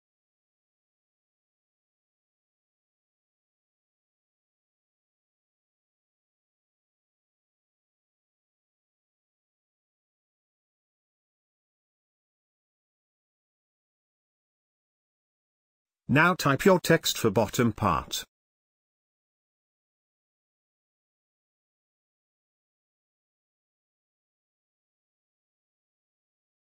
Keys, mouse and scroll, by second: 4.2 ctrl+space, 4.4-10.6 ctrl+drag, 10.8 space, 11.0 ctrl+click, 12.5 click, 12.5 scroll down 1, 15.6 click, 15.6 click, 18.2-20.0 typing, 21.7 click, 23.1-25.9 alt+shift+drag.